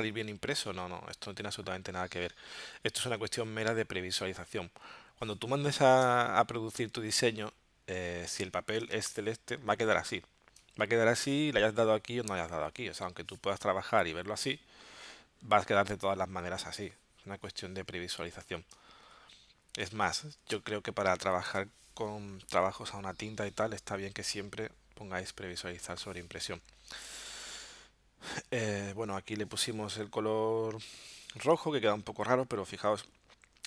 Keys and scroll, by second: 6.0 space, 8.9 space, 10.6 space, 18.7 space, 20.6 space, 21.5 v.